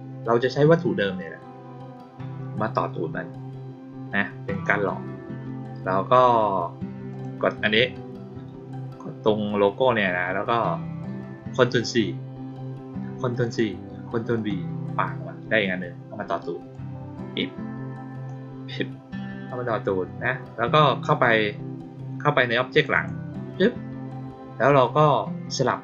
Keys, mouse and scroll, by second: 4.4 click, 7.0 click, 13.3 click, 14.3 click, 16.6-18.2 drag, 22.6 click, 22.9 click.